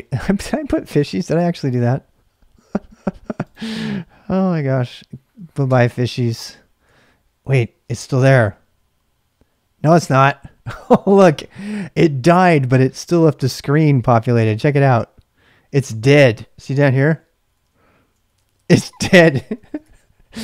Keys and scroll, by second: 0.2 BackSpace, 0.4 BackSpace, 0.8 BackSpace, 1.2 BackSpace, 5.6 Return, 8.1 ctrl+b, 8.2 n, 16.6-19.8 typing.